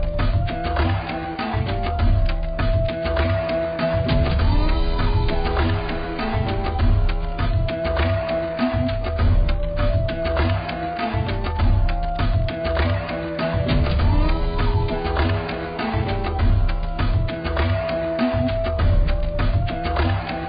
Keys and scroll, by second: 16.0 z.